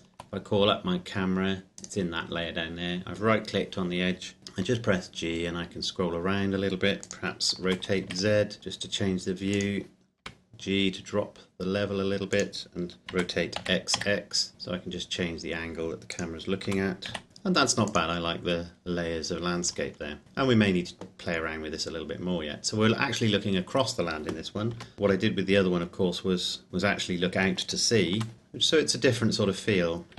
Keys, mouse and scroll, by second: 1.9 right click, 4.4 g, 7.1 click, 7.6 r, 8.1 z, 9.6 click, 10.2 g, 12.4 click, 13.0 Escape, 13.1 r, 13.6 x, 16.1 click, 16.7 r, 17.0 z, 17.9 click, 24.9 g, 27.7 click, 28.1 r, 28.3 z, 30.1 Escape.